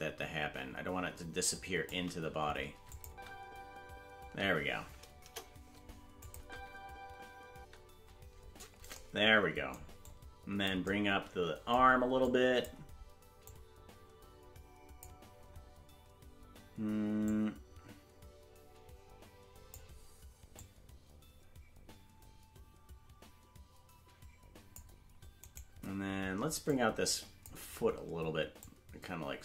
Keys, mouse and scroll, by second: 2.9 click, 3.0 space, 4.5 space, 5.2 KP_0, 6.2 click, 6.3 space, 8.2 space, 10.0 click, 12.2 click, 13.4 click, 17.2 click, 20.5 click, 25.6 right click, 26.6 click, 28.5 click.